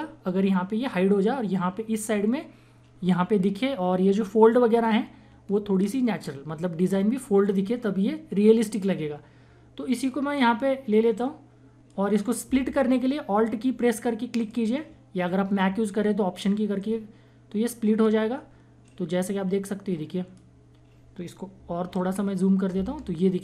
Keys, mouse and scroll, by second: 10.3 click, 10.6-14.3 drag, 14.3 alt+click, 16.7-22.0 alt+drag, 22.0 ctrl+=, 22.7 space, 23.0 click, 23.2 space.